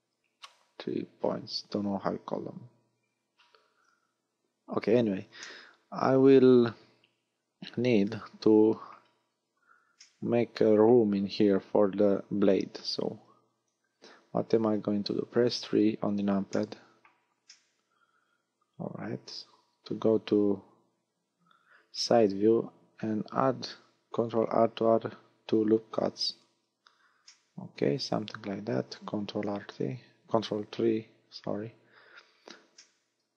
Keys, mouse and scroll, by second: 5.4 middle click, 9.2-10.0 scroll up 5, 10.0 middle click, 13.5 KP_1, 14.6 KP_3, 16.0-16.4 scroll down 2, 16.5 middle click, 17.5 middle click, 20.6 KP_3, 24.1 ctrl+r, 26.4 click, 27.2 middle click, 29.4 ctrl+KP_3, 31.8-32.8 scroll up 4, 32.8 shift+middle click.